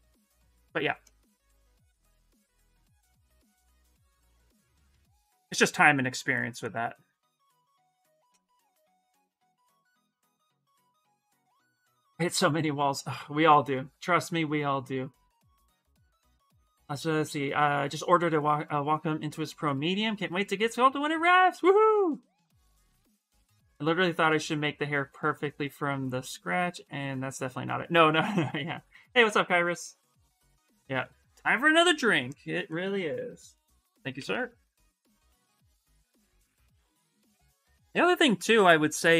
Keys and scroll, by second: 0.0-0.3 typing, 3.9 s.